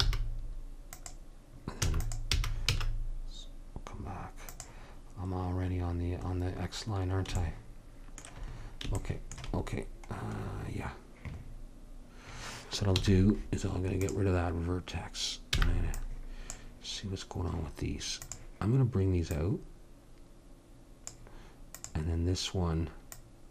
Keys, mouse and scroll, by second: 0.1 g, 1.9 e, 2.3 g, 13.0 x, 15.7 b, 18.2-21.1 drag, 21.8-23.5 drag.